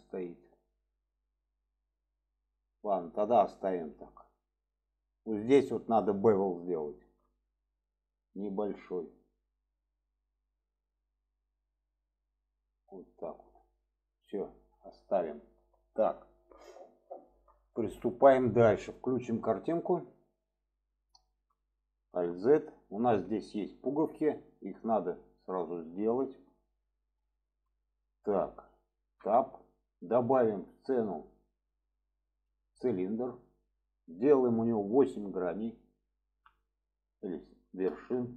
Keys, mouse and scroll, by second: 3.5 middle click, 4.7 shift+middle click, 5.8 click, 6.8 alt+shift+click, 9.2 click, 10.5-13.3 drag, 14.7-16.0 middle drag, 16.3 shift+middle drag, 17.2 shift+middle drag, 18.1 shift+middle click, 20.4 click, 21.1-21.4 shift+middle drag, 22.4 alt+z, 23.3-23.6 middle drag, 25.8-26.5 shift+middle drag, 27.3 shift+middle click, 29.2 Tab, 31.7-33.6 drag, 34.9-38.2 drag.